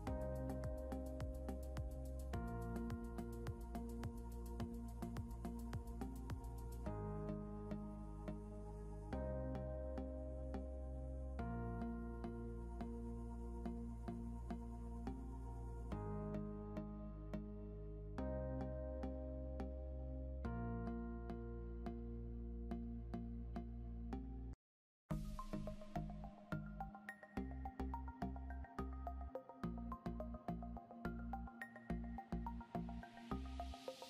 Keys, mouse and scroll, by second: 3.6 F8, 7.9-10.5 typing, 13.2-14.8 typing.